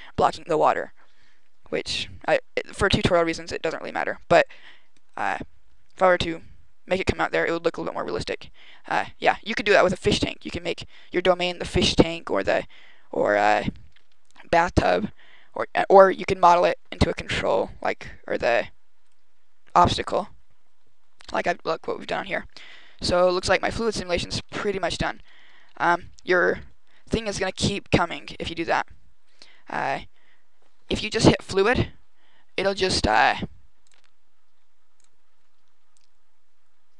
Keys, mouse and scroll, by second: 18.9 right click, 22.4 Right, 22.7-23.9 Right, 24.1 Left, 24.2 Left, 24.3 Left, 24.5 Left, 24.6 Left, 24.7 Left, 24.8-25.3 Left, 25.6 Left, 25.7 Left, 25.8 Left, 25.9 Left, 26.1 Left, 26.3 Right, 26.5 Right, 29.1 right click, 29.7 click, 33.7 click.